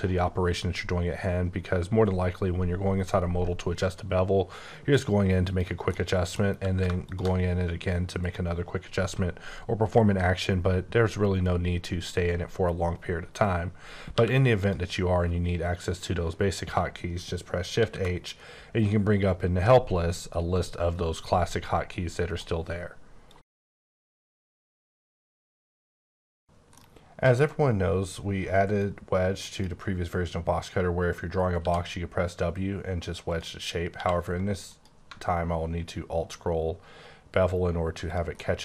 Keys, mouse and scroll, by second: 5.5 click, 5.9 middle click, 6.4 scroll up 1, 7.1 ctrl+shift+click, 14.2 q, 14.6 click, 17.8 shift+h, 22.3 right click, 28.8 click, 31.6 w, 33.3 click, 33.7 scroll up 1, 33.9 q, 34.7 click, 35.2-37.3 alt+scroll down 11, 37.3-38.0 alt+scroll down 6, 38.1 click, 38.4 middle click.